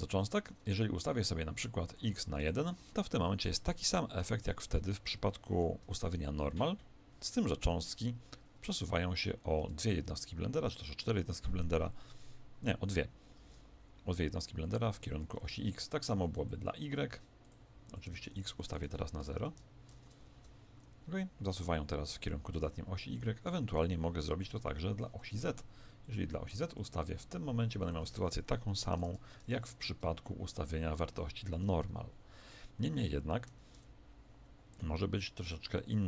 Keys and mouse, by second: 4.8 alt+a, 4.8-6.4 middle drag, 5.8 KP_1, 7.6 KP_7, 15.2 Escape, 16.3-20.0 drag, 20.4 alt+a, 23.0 Escape, 23.5-25.8 middle drag, 24.3 KP_1, 26.0-29.6 drag, 31.5 alt+a, 33.4 Escape, 35.7-36.0 middle drag.